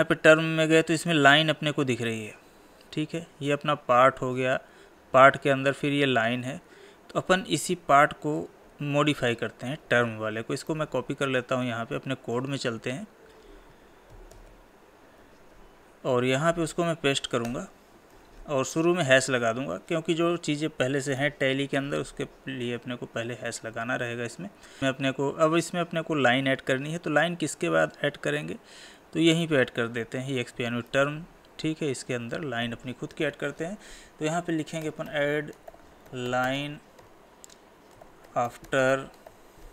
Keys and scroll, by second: 10.7 ctrl+c, 18.2 ctrl+v, 30.9 ctrl+c, 37.0 Tab.